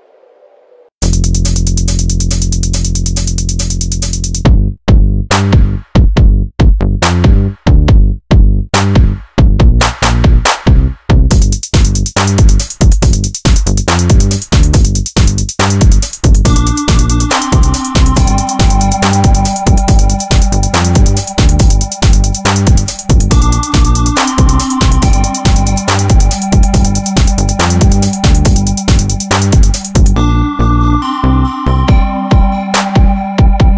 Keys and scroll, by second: 3.9 Tab, 7.0 alt+z, 11.2 Tab, 11.5 alt+z, 13.2 Tab, 15.1 Tab, 18.4 Tab, 18.8 alt+z, 20.7 Tab, 20.9 alt+z, 24.4 ctrl+j, 25.0 Tab, 26.7 Tab, 27.2 alt+h, 27.9 Tab, 28.4 Tab, 29.1 ctrl+j, 29.5 Tab, 30.1 ctrl+1.